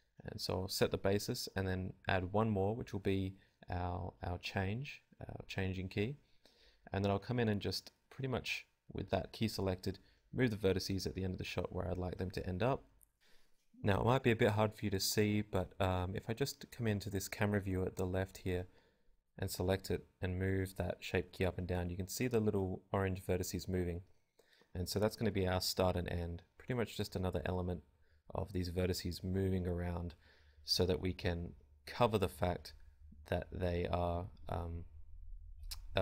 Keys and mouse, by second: 0.7 Tab, 1.8-3.4 drag, 2.4 g, 4.1-7.9 drag, 5.7 g, 6.9 g, 7.9 g, 9.5-16.0 drag, 11.1 Tab, 17.5-19.5 drag, 23.3 KP_0, 23.5 KP_0, 27.7-31.8 drag, 33.7-36.0 drag.